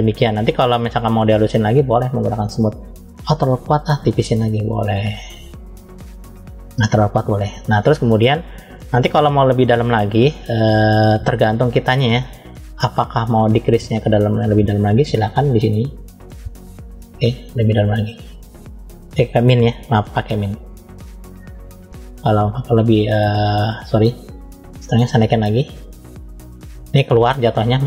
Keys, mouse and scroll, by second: 0.5-1.9 scroll up 1, 2.0 click, 4.1 click, 7.6 middle click, 9.5-10.6 middle drag, 13.9 click, 15.5 f, 17.3 click, 19.1 click, 19.7 click, 20.5 click, 23.7 click, 24.5 click, 25.9 click.